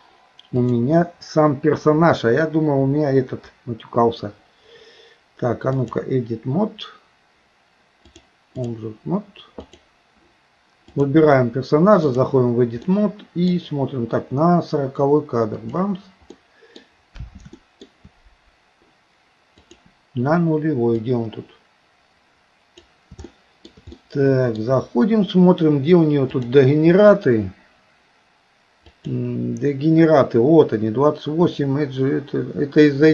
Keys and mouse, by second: 0.6-6.1 drag, 8.2 click, 9.6 click, 11.0-12.3 drag, 12.9 middle click, 15.7 click, 16.4 middle click, 17.6 shift+middle click, 19.7 click, 21.1-23.0 drag, 23.3 shift+middle click, 24.0 middle click, 26.3-29.2 drag.